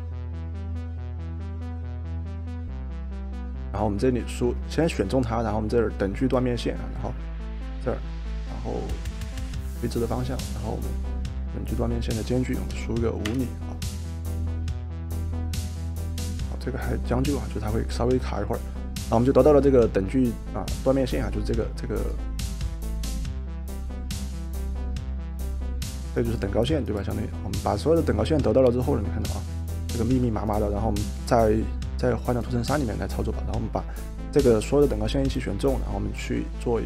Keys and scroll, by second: 12.7 5, 13.3 Return.